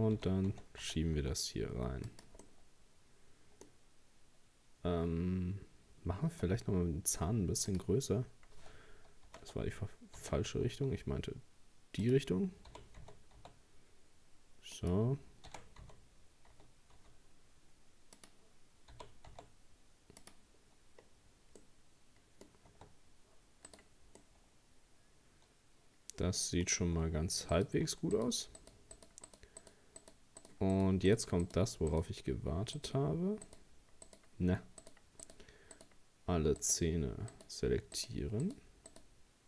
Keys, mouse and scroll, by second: 0.2 g, 2.4-5.5 middle drag, 6.3 s, 9.3 ctrl+z, 10.2 s, 12.7 g, 15.5 r, 18.9 g, 20.6-21.6 scroll down 2, 21.6-22.7 middle drag, 22.7 Tab, 23.7 right click, 24.2-26.7 middle drag, 26.7-27.5 scroll up 2, 27.5 right click, 28.2 shift+right click, 28.6 shift+right click, 29.0 shift+right click, 29.3 shift+right click, 29.6 shift+right click, 30.0 shift+right click, 30.4 shift+right click, 30.8 shift+right click, 31.1 shift+right click, 31.4 shift+right click, 31.9 shift+right click, 32.8 shift+right click, 33.5 shift+right click, 34.1 shift+right click, 34.8 shift+right click, 35.2 shift+right click, 35.8 shift+right click, 36.6 shift+right click, 37.3 shift+right click, 38.0 shift+right click, 38.4 shift+right click, 38.9 shift+right click.